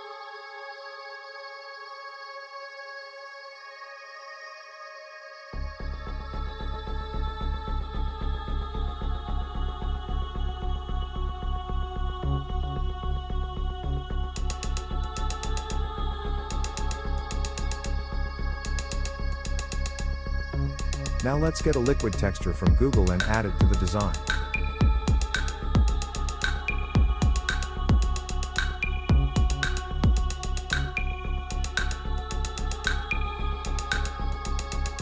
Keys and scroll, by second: 24.5-25.6 typing.